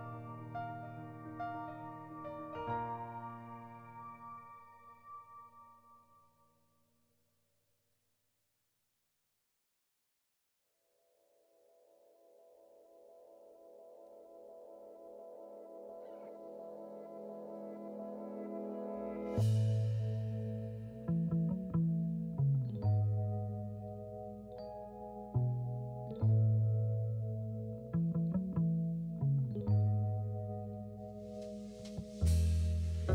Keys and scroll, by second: 3.9 ctrl+z, 5.0 s, 7.7 s, 8.0 2, 12.9 s, 16.3 s, 17.6 s, 18.1 1, 21.0-22.9 typing, 30.0 s, 31.0 s.